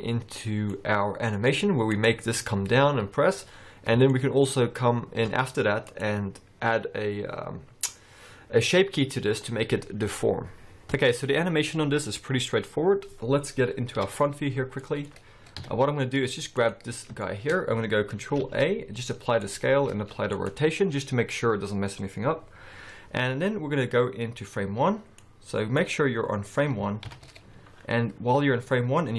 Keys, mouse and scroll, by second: 0.8 middle click, 2.0 click, 3.8-4.2 scroll up 3, 4.2 shift+middle click, 4.7-5.0 scroll up 2, 6.0 click.